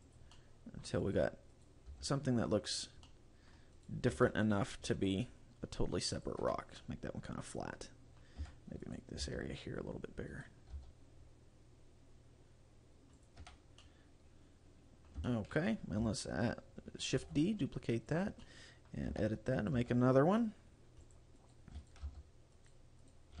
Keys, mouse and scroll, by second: 0.2 click, 0.4 middle click, 1.1 right click, 1.2-1.6 scroll up 1, 1.6 right click, 2.0 g, 2.9 right click, 3.2 middle click, 3.8 right click, 4.2 g, 6.4 click, 6.5 Tab, 6.9 middle click, 8.6 Tab, 8.9 right click, 9.3 s, 10.5 right click, 10.8 s, 13.3 click, 13.6 Tab, 13.8 middle click, 15.3 shift+middle click, 17.3 shift+d, 18.3 click, 18.5 middle click, 19.2 Tab, 19.7 right click, 19.8 g, 21.2 click, 21.5 right click, 21.9 shift+right click, 22.1 g, 22.8 right click, 23.2 right click.